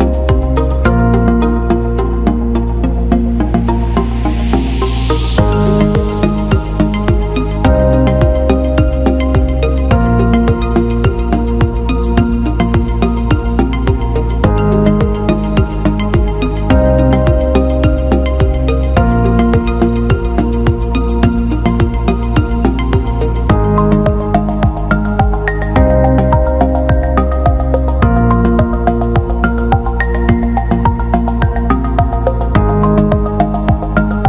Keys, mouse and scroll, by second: 1.8 alt+middle click, 2.7 ctrl+alt+middle click, 3.7 click, 4.5 alt+middle click, 6.0 ctrl+b, 10.0 alt+middle click, 11.4 click, 12.5 ctrl+d, 13.5 right click, 15.1 click, 18.4 alt+middle click, 19.0 ctrl+alt+middle click, 20.3 click, 21.1 ctrl+b, 23.5 click, 24.5 right click, 26.9 alt+middle click, 27.2 alt+right click, 27.7 click, 28.9 alt+middle click, 29.4 ctrl+alt+middle click, 30.1-32.5 drag, 33.1 alt+shift+middle drag, 33.7 click, 33.9-34.2 alt+middle drag.